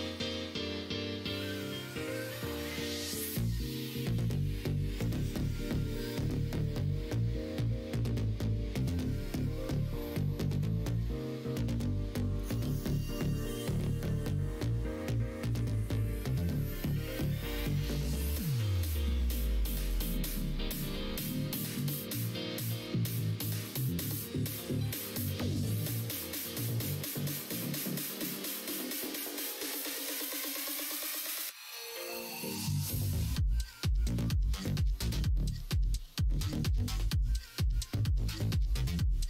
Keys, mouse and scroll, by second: 0.1 click, 1.7-3.7 middle drag, 4.0 middle click, 5.1 click, 5.5 middle click, 5.9 ctrl+r, 7.5 middle click, 7.7 3, 8.2 click, 8.9 shift+click, 10.1 click, 11.1 shift+click, 11.6 shift+click, 12.2 shift+click, 13.0 shift+click, 13.2 middle click, 13.9 middle click, 14.9 shift+click, 16.0 shift+click, 16.4 shift+click, 16.9 shift+click, 17.7 shift+click, 18.2 shift+click, 21.9 shift+click, 22.5 shift+click, 23.4 shift+click, 24.0-25.3 middle drag, 25.6 middle click, 26.1 e, 28.6 KP_1, 28.8 KP_3, 33.0 g, 35.5 ctrl+z, 36.6 e.